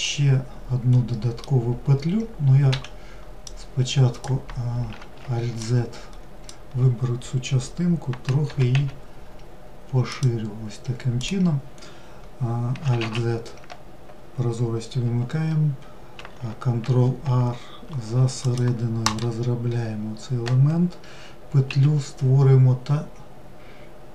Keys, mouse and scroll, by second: 1.7 1, 10.2 click, 24.0-24.1 middle drag.